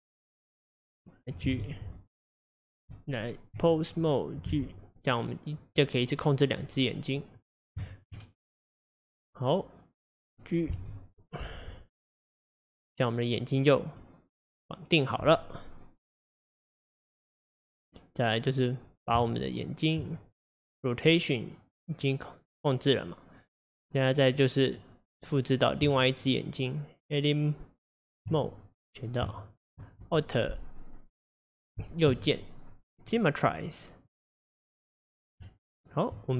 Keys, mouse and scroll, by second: 1.6 g, 2.5 click, 2.9 Tab, 3.9 click, 4.6 g, 6.7-8.2 middle drag, 8.2-9.0 scroll up 2, 9.0 click, 10.2 click, 10.8 g, 14.0-16.3 middle drag, 16.3 click, 17.5 click, 19.2 Tab, 20.4 click, 21.1 click, 24.4-25.9 middle drag, 25.9 Tab, 28.8 click, 29.6 shift+click, 32.3-34.1 right drag, 34.1-35.4 middle drag, 36.2 Tab.